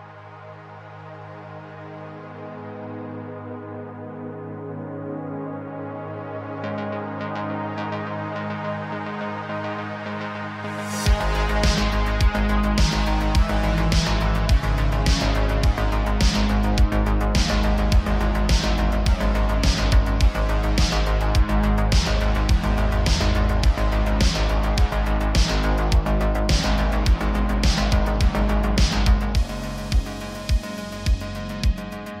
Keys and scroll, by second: 3.8 Tab, 8.2 ctrl+r, 9.6 s, 11.0 s, 13.3 1, 15.2 s, 17.8 s, 19.8 e, 20.1 s, 26.9 Tab, 27.2 Tab, 29.5 3, 29.9 x.